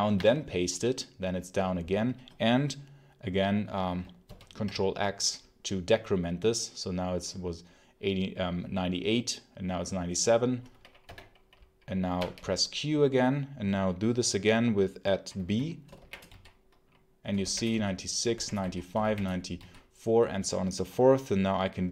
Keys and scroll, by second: 0.0 p, 4.1 ctrl+x, 10.9 0, 12.0 q, 15.8 shift+2, 16.1 b, 17.3-19.4 typing.